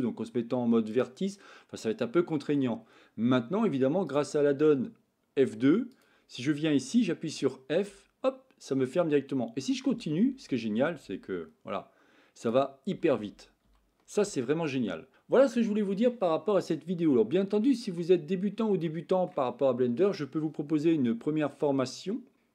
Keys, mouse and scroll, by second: 1.0 click, 1.8 middle click, 4.0 click, 7.7 f, 9.8 f, 10.2 f, 10.4 f, 10.7 f, 12.3 click, 12.8 f, 13.1 f, 13.3 f, 13.6 f, 14.4 middle click, 16.7 middle click, 18.9 shift+middle click.